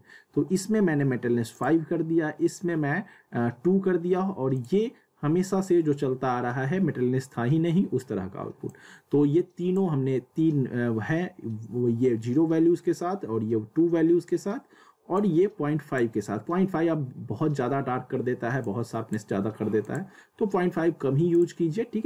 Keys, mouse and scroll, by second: 1.5 click, 4.6 click, 8.7-12.1 drag, 15.1-18.3 drag, 18.6 click.